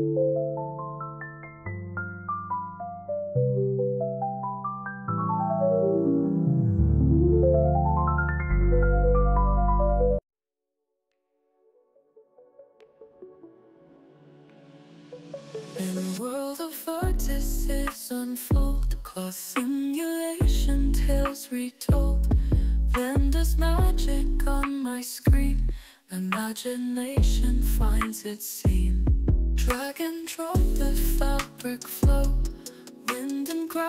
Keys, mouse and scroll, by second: 2.4 click, 2.9 space, 3.5 ctrl+Tab, 4.2 click, 4.6 ctrl+Tab, 6.0 alt+click, 6.6 alt+click, 7.5 alt+middle click, 11.4 click, 12.9-16.5 drag, 16.8 space, 17.3 alt+click, 19.4 click, 20.7 click, 24.3 space, 27.0-29.1 drag, 30.1 click, 31.5 i, 33.0 click.